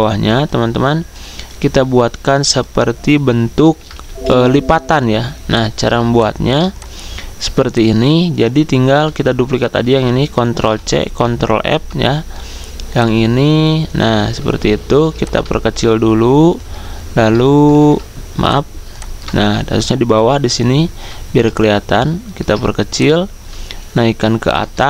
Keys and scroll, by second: 14.9 ctrl+c, 14.9 ctrl+f, 17.6 ctrl+z.